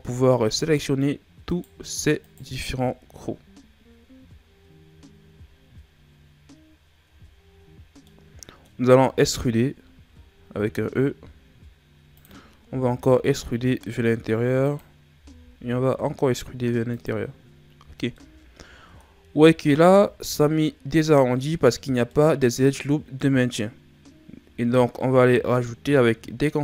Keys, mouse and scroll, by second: 0.6 shift+right click, 1.4 shift+right click, 2.2 shift+right click, 2.7-3.4 scroll down 4, 3.4-4.2 scroll up 3, 7.5 scroll down 5, 8.0 middle click, 8.8-9.2 scroll up 3, 10.6 e, 12.7 e, 15.2 e, 17.4-18.2 scroll down 3, 18.2-19.6 middle drag, 19.6-20.1 shift+scroll up 4, 21.9 scroll down 1, 22.1-23.8 middle drag, 23.8-24.6 scroll down 3, 24.6-25.0 shift+scroll down 5, 25.0-26.6 middle drag.